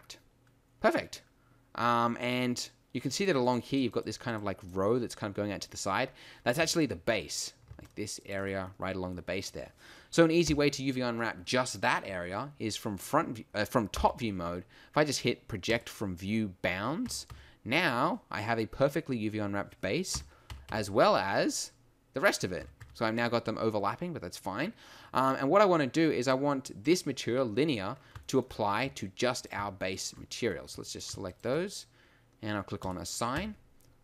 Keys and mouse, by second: 6.0-7.2 middle drag, 7.4-8.8 middle drag, 10.5 alt+shift+KP_7, 15.8 u, 17.0 a, 17.3 a, 20.1 KP_1, 20.5 a, 20.7 a, 22.6 a, 22.8 a, 27.9 middle click, 33.3 a.